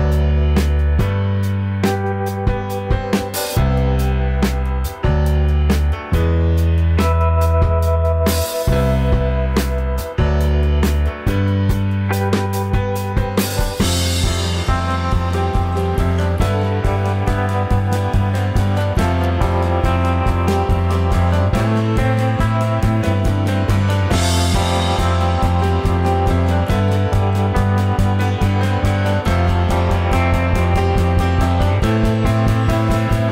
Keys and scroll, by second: 10.7 space, 32.1 ctrl+z.